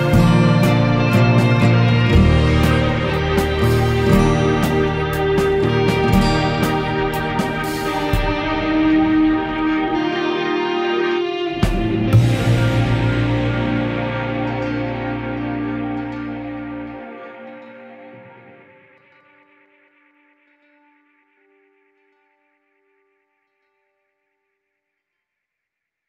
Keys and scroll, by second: 10.7 ctrl+0.